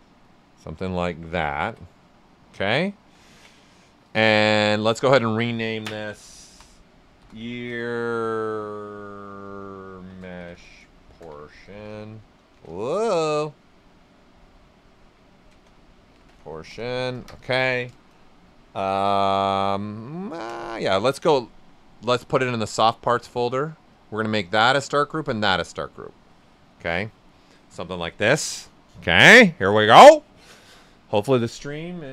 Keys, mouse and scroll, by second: 0.8 click, 1.0 q, 1.4 ctrl+right click, 2.9 alt+right click, 6.8 ctrl+click, 7.1 shift+e, 7.6 shift+space, 9.8-10.9 typing, 12.9 typing, 14.9-16.7 typing, 22.8-23.9 drag, 26.9 alt+right click.